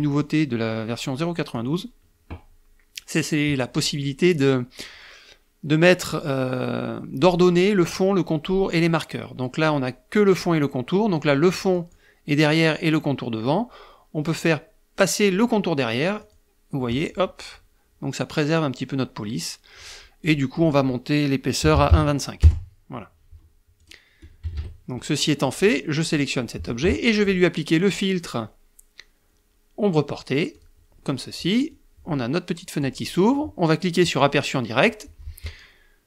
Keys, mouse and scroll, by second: 1.4 click, 3.6 middle click, 11.5 click, 16.0 click, 20.0 click, 21.4 KP_1, 21.5 KP_Decimal, 21.7 KP_5, 22.2 KP_Enter, 23.6 click, 24.2 KP_Subtract, 25.0 middle click, 25.9 click, 27.7 click, 30.3 click, 31.4-32.8 drag, 33.9 click.